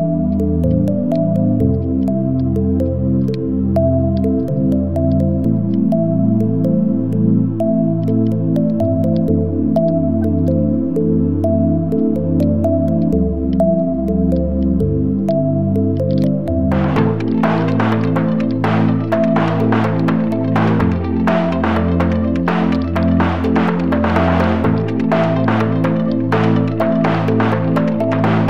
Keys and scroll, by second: 0.2 ctrl+z, 0.4 ctrl+space, 1.6 ctrl+g, 4.7 ctrl+z, 7.6 Delete, 8.8 v, 10.1 v, 12.6 v, 14.8 a, 16.0 space, 16.3 space, 20.8 space, 27.3 space, 28.3 space.